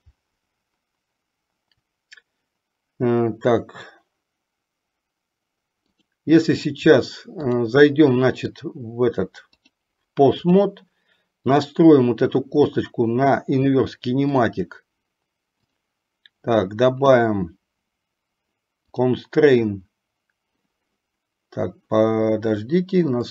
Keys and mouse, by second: 7.7 click, 9.6-10.9 drag, 11.6 click, 14.4 click, 15.8 click, 19.1 click.